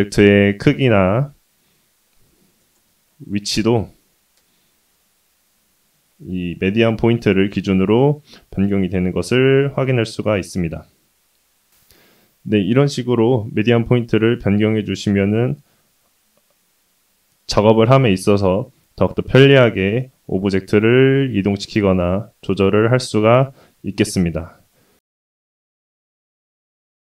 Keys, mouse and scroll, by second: 0.5 middle click, 1.1 click, 1.6 x, 2.8 shift+middle click, 3.3 middle click, 3.8 click, 7.3-8.4 scroll down 3, 8.6 g, 11.9 shift+s, 15.5 middle click, 18.7-19.3 scroll up 1, 19.4 shift+middle click.